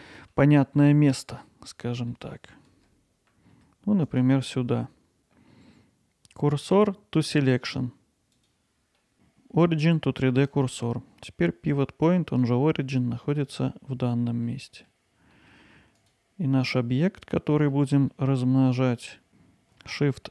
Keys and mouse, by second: 0.1 middle drag, 0.7 middle drag, 1.1 middle drag, 2.1-8.0 middle drag, 9.0 middle click, 9.1-14.1 right drag, 14.5-14.9 middle drag, 15.3 middle drag, 16.1-16.7 drag, 16.7-17.7 middle drag, 18.1 middle click.